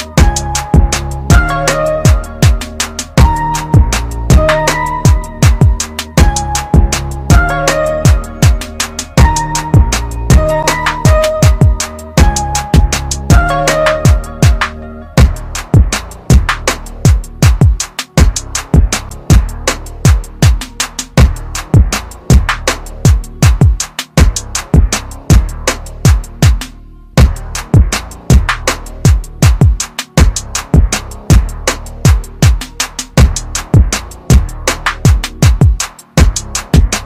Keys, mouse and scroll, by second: 0.2-1.9 typing, 4.0 typing, 4.9 click, 9.3 click, 15.1-17.8 typing, 20.1 click, 21.3 typing, 23.7 typing, 25.6 click, 31.1 click.